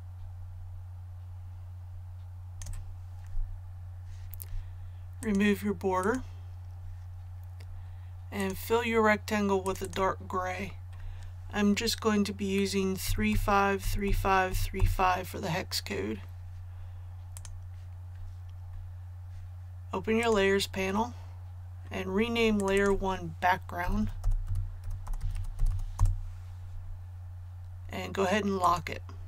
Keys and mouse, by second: 10.2 click, 13.0-14.7 typing, 17.3 click, 23.5-26.2 typing, 28.6 click.